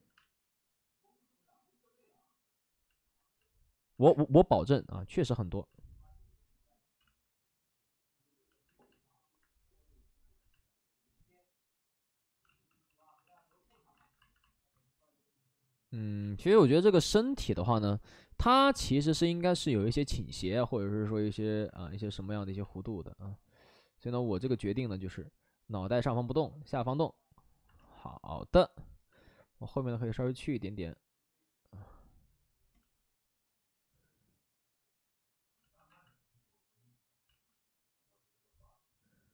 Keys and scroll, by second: 0.2 space, 4.0 space, 7.0 ctrl+z, 12.4-13.2 typing, 13.9 alt+s, 16.1 ctrl+z, 18.7 ctrl+z, 21.7 alt+s, 22.3 w, 35.6 ctrl+z, 35.8 x, 37.2 ctrl+z.